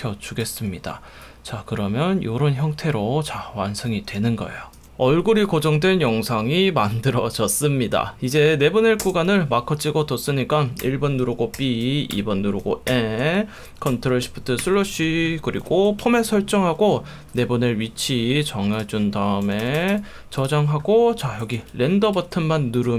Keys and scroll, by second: 4.8 space, 9.0 space, 10.8 1, 11.6 b, 12.2 2, 12.9 n, 14.6 shift+super+/, 16.0 F1, 16.8 F1, 19.4 2, 21.5 F1.